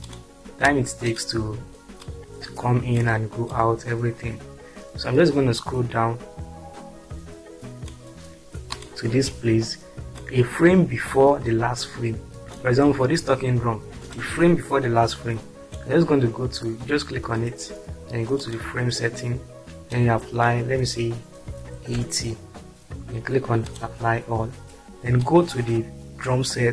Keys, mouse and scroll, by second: 20.0 click, 21.8 typing, 23.8 click.